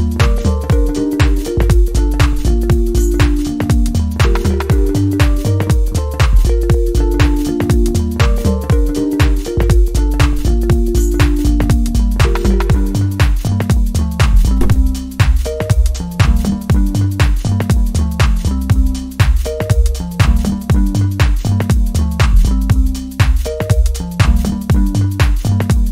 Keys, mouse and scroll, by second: 3.7 alt+click, 7.0-7.6 scroll down 1, 7.7 click, 8.3 right click, 8.4 right click, 8.5 click, 8.7 scroll down 1, 10.8 click, 12.0 alt+scroll up 1, 12.3-16.9 drag, 17.4-18.5 scroll up 1, 18.5-20.7 drag, 21.1 scroll up 1, 21.3-21.8 scroll down 1, 21.8-24.9 drag.